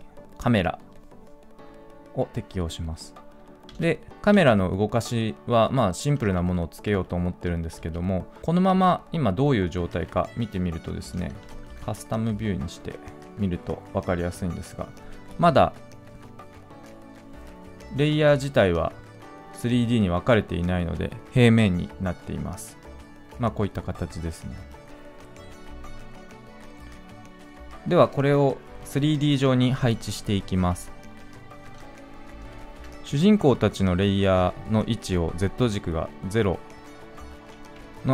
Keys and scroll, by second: 11.7 ctrl+z.